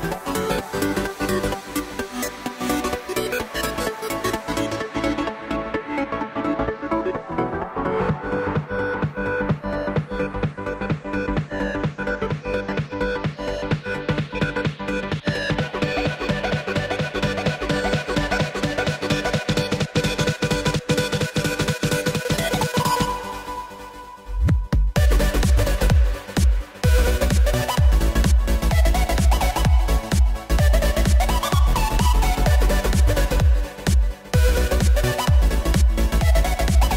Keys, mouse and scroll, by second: 9.6-11.3 middle drag, 11.3 scroll up 1, 11.7-15.1 middle drag, 15.1 Tab, 16.1 click, 16.6-19.0 drag, 19.0-20.3 shift+middle drag, 20.3 click, 20.8-22.7 drag, 22.7-23.5 scroll down 3, 23.5-24.5 middle drag, 24.5 KP_0, 25.8 Tab, 30.1-31.4 drag, 31.4-32.2 shift+middle drag, 32.2-32.9 scroll down 2, 32.9 click, 33.3 scroll up 2, 34.2 z, 34.5-35.2 scroll up 1, 35.4-36.5 scroll up 1.